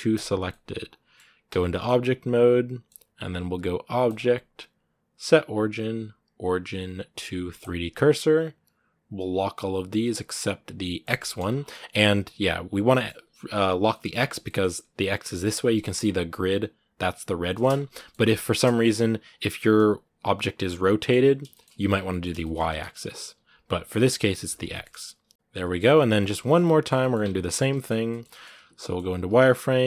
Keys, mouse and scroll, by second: 0.0 shift+s, 0.3 middle click, 1.2 Tab, 1.5-7.5 middle drag, 9.0-11.2 drag, 11.2 z, 11.3 scroll down 2, 11.5 middle click, 12.0 r, 12.7 scroll down 1, 12.7 middle click, 12.9 r, 13.7 middle click, 14.1 scroll down 2, 14.2 middle click, 15.2-15.6 scroll down 6, 15.6-17.5 shift+middle drag, 17.5 scroll up 2, 17.7-19.0 middle drag, 19.0-20.8 right drag, 20.8 middle click, 21.0 scroll up 2, 21.3-22.4 shift+middle drag, 22.4 scroll up 2, 22.6 right click, 22.8 middle click, 23.1 r, 24.5 shift+middle click, 24.8 right click, 26.0 right click, 26.2 shift+middle click, 26.9 scroll up 2, 27.0 Tab, 27.2-28.4 middle drag, 28.4 z, 28.5 middle click, 28.7 scroll up 1, 28.9 a.